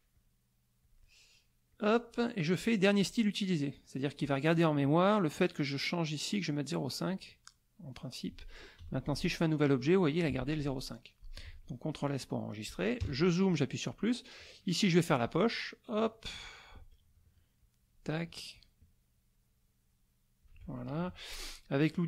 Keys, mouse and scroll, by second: 0.1 click, 0.8 click, 1.7 click, 3.0 click, 4.0 click, 5.9 right click, 6.8 click, 7.5 middle click, 8.8 F6, 9.0 click, 10.3 ctrl+z, 10.6 ctrl+click, 11.4 ctrl+s, 11.9 ctrl+click, 13.0 KP_Add, 13.7 click, 15.2-16.9 drag, 17.6 shift+click, 18.5-20.6 shift+drag, 21.0 shift+F2.